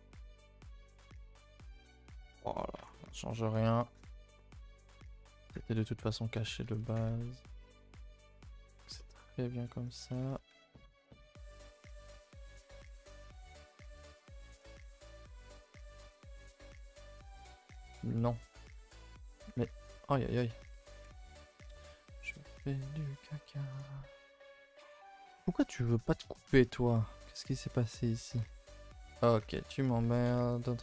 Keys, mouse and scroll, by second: 0.1 a, 0.2 a, 0.3-0.6 middle drag, 0.6 scroll down 2, 0.8-2.4 middle drag, 2.4 Tab, 2.5 middle click, 2.8 Tab, 2.9 middle drag, 3.1 scroll up 2, 3.3-3.9 middle drag, 3.9 KP_0, 5.1 scroll down 3, 5.2 a, 5.3 a, 6.0 scroll up 3, 6.3 Tab, 6.6 a, 6.8 a, 7.2-7.6 middle drag, 7.6-8.2 scroll up 10, 8.2-9.8 middle drag, 9.8 click, 10.1-13.0 typing, 10.9 alt+click, 15.3 k, 17.0 click, 17.3 h, 18.0 ctrl+z, 18.2 middle click, 18.5 g, 19.6 ctrl+z, 20.3 h, 21.7 ctrl+z, 22.3 k, 24.7 middle click, 24.9 ctrl+z, 25.1 middle click, 25.3 scroll up 1, 25.4 shift+middle click, 25.7 a, 25.8 a, 26.0 shift+middle click, 26.2 scroll up 2, 26.7 k, 29.5 3, 29.8 click, 30.6 x.